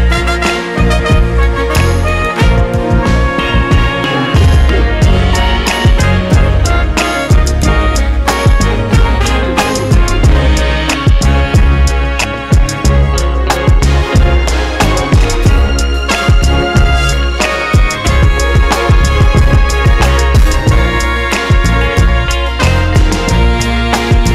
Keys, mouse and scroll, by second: 0.9 Tab, 2.0 alt+a, 2.3 b, 3.1 Tab, 3.2 scroll down 1, 3.5 KP_0, 3.7 scroll up 1, 4.1 scroll down 1, 4.9 scroll down 1, 8.7 scroll up 1, 9.9 alt+click, 10.3 scroll down 1, 10.5 g, 11.1 Tab, 11.4 KP_0, 11.7-12.3 scroll up 1, 12.3 z, 13.1 ctrl+z, 15.3 alt+a, 19.1 click, 20.4 click, 20.9 click, 22.1 scroll down 1, 22.6 scroll down 1.